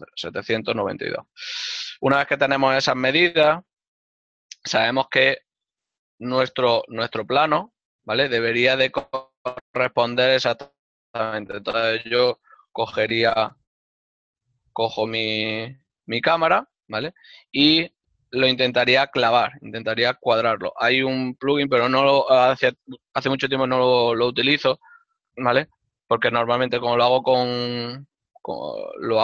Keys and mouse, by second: 4.5 click, 7.8 ctrl+middle click, 13.0 ctrl+middle click, 16.7 Tab, 20.7 right click.